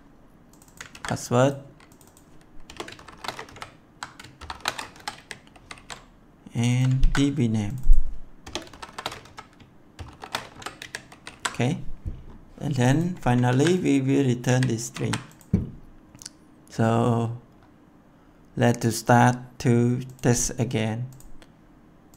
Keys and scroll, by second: 0.8 ctrl+c, 2.6 BackSpace, 2.9 shift+', 3.4 Left, 4.3 shift+=, 4.8 Left, 5.1 ctrl+v, 5.4 ctrl+s, 6.9 ctrl+c, 8.3-10.4 typing, 10.7 ctrl+v, 11.0 ctrl+s, 13.4 ctrl+c, 14.4 ctrl+v, 14.7 ctrl+s.